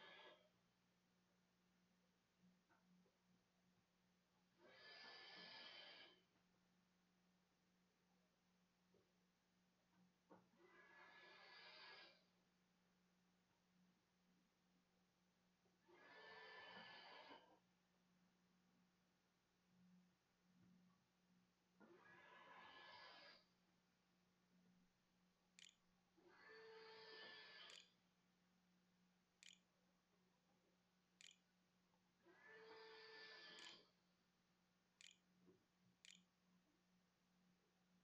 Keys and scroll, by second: 6.6-7.4 typing, 12.0 `, 24.8 Escape, 25.1-31.0 typing, 33.4 Tab, 33.6-37.8 typing.